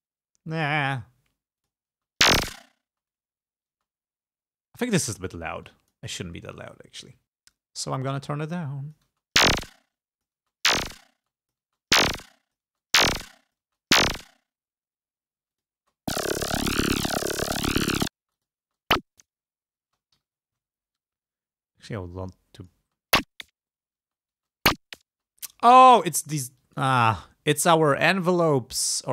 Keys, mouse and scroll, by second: 0.6 click, 1.7 click, 2.0 space, 3.0 space, 3.2 click, 3.8 space, 4.8 click, 5.8 click, 7.3 click, 8.6 click, 9.1 space, 9.8 space, 10.0 click, 10.5 space, 11.2 space, 11.3 click, 12.4 click, 13.4 click, 15.5 space, 15.6 click, 18.3 space, 18.4 click, 19.9 space, 20.3 g, 20.4-20.9 scroll down 2, 20.9 scroll up 2, 22.4 click, 22.9 space, 24.1 space, 25.2 space, 25.4 click, 26.6 click, 28.2-29.1 drag.